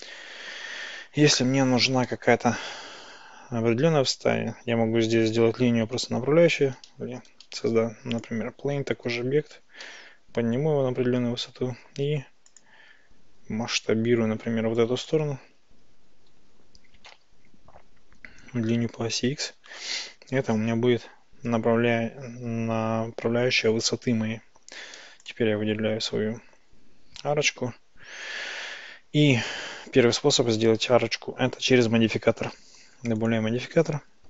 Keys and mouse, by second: 0.8 Tab, 7.3 shift+a, 9.9 g, 12.5 ctrl+click, 14.5 Tab, 14.8 click, 16.4 g, 17.2 x, 19.8 ctrl+click, 25.0 Tab, 32.4 click, 33.4-34.2 drag.